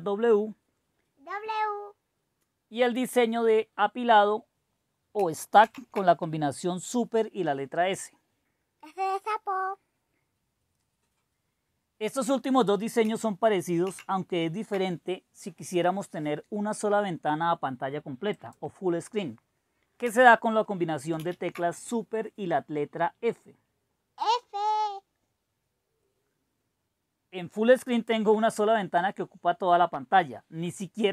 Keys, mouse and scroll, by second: 5.7 super+s, 13.8 super+w, 18.4 click, 19.0 click, 21.2 super+f, 24.5-25.7 scroll down 1, 25.7-26.1 scroll up 1, 26.1 scroll down 1, 26.2-27.6 scroll up 1, 27.9 click, 29.2-31.1 scroll down 6.